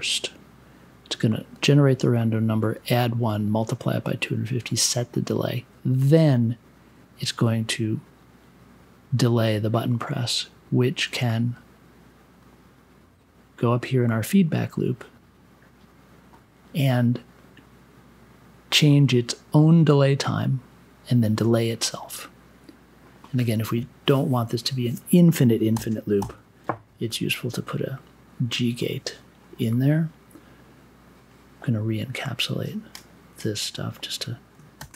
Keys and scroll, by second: 25.7 n, 26.2 g, 34.7 shift+super+e.